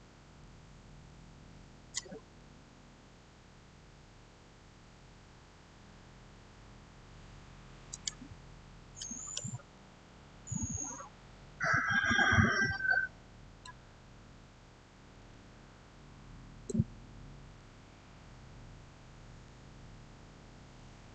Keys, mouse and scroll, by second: 7.7 scroll up 1, 7.8 click, 8.8-11.4 middle drag, 14.6-15.5 typing, 16.4 Return, 20.2-21.1 typing.